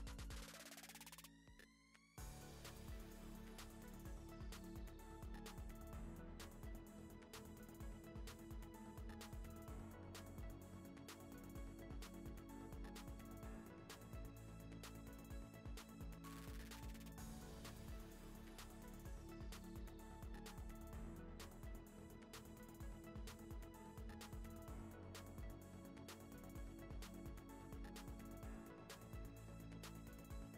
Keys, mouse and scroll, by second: 0.0 click, 0.2 scroll down 5, 0.3 h, 0.7 ctrl+s, 0.8 scroll up 1, 2.5 shift+right click, 2.6 middle click, 2.9-5.8 typing, 4.1 scroll up 3, 4.2 shift+middle click, 4.4 Tab, 4.8 Tab, 5.6 Tab, 6.8 shift+middle click, 7.0-9.6 typing, 9.1 shift+middle click, 9.6 Tab, 10.4 middle click, 10.4 scroll down 4, 10.6 middle click, 10.8-12.2 drag, 12.2 z, 12.8 scroll down 4, 13.2 KP_0, 13.3 z, 13.6 z, 14.3 click, 14.7 click, 20.2 middle click, 20.5 click, 20.7 KP_0, 21.0 click, 21.9 ctrl+z, 22.1 click, 22.4 click, 23.3 click, 23.5 click, 24.1 click, 29.1 scroll down 2, 29.3 shift+s, 29.9 g, 30.3 click.